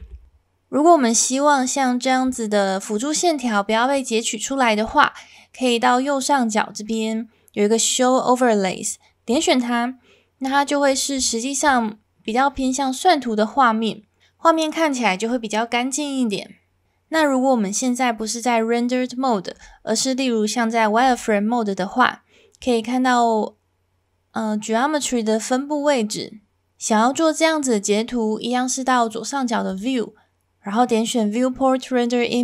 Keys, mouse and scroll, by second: 9.3 click, 11.3 shift+middle drag, 11.9-12.3 middle drag, 19.6 z, 21.1 click, 29.7-32.4 drag.